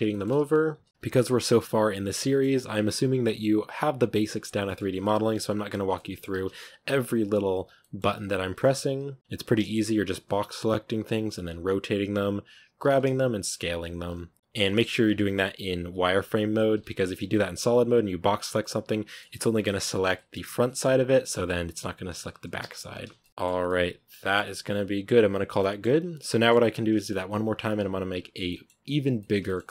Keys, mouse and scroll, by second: 0.0-0.6 typing, 0.0 shift+middle click, 0.9-2.0 middle drag, 2.0-4.8 typing, 2.1 shift+middle click, 4.3 Tab, 4.4 scroll down 1, 4.5 middle drag, 4.9-5.7 middle drag, 5.7 Tab, 5.8-6.3 middle drag, 6.3 z, 6.3 scroll up 3, 6.4 a, 7.5-9.5 typing, 7.7 middle drag, 10.9 b, 11.7 r, 12.7 g, 13.2 s, 13.6 g, 13.9 s, 14.3 Tab, 14.3 middle click, 14.5 Tab, 14.6 middle click, 14.8 scroll up 1, 15.0 z, 16.6 a, 17.2 z, 18.2 b, 18.5-19.8 middle drag, 19.8 a, 20.0 middle click, 20.9 b, 21.1 g, 22.6 z, 22.8 a, 23.0 scroll down 1, 23.1-23.4 middle drag, 23.4 a, 23.5-25.4 middle drag, 25.4 scroll down 2, 25.4-25.9 middle drag, 25.9-26.2 right drag, 26.2-29.7 shift+middle drag.